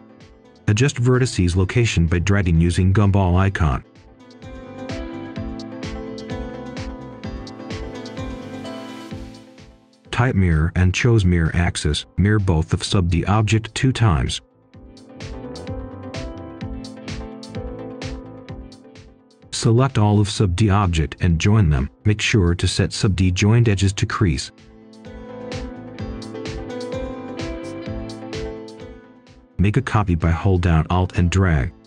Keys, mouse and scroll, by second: 0.1 right click, 1.1-4.0 drag, 5.0 right click, 6.8 click, 8.4 typing, 8.8 Return, 10.2 click, 12.6 right click, 13.4 click, 13.9 right click, 14.7 click, 16.2 right click, 17.0 click, 18.6-19.5 typing, 21.4 click, 22.0 right click, 22.6 click, 23.4 Tab, 25.2 click, 26.7 right click, 27.3 scroll down 1, 27.6 right click, 28.3 click, 28.5 right click, 29.6 alt+click, 31.5 click.